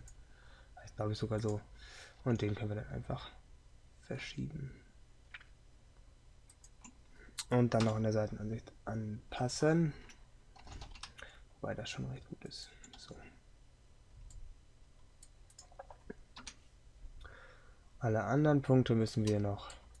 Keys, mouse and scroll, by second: 2.3 g, 7.9 KP_3, 16.5 KP_3.